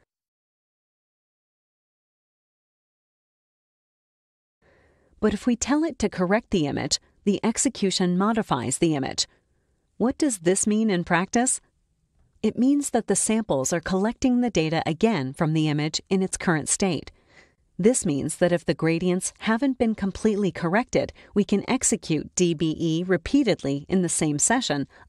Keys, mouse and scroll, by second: 1.0 click, 2.7 click, 4.3 click, 5.1 click, 6.3 click, 6.6 click, 6.8 click, 7.0 click, 8.0 click, 21.7 click, 23.0 click, 24.3 click.